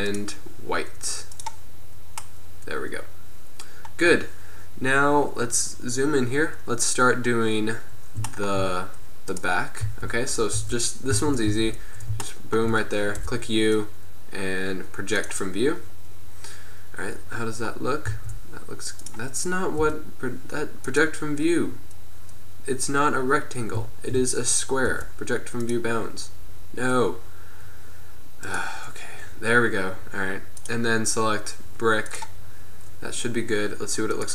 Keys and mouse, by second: 3.4 middle click, 9.4-9.9 right drag, 9.9 z, 10.6 Tab, 11.3 a, 11.6 a, 13.2 u, 18.2 s, 19.9 u, 25.0 u, 32.5-34.2 middle drag.